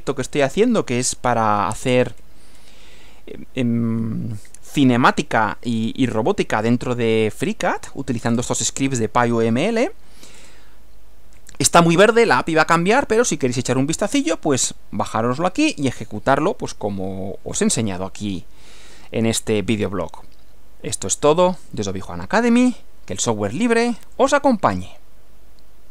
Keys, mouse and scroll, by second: 1.1 scroll down 1, 1.9-2.8 scroll down 2, 8.3 scroll up 1, 8.5 scroll down 2, 10.3-10.7 scroll up 2, 24.1 click.